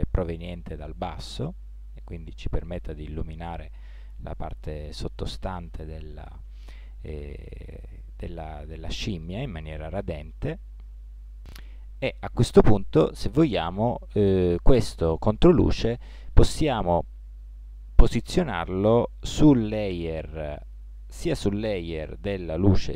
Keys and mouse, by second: 11.4 KP_3, 19.2 m.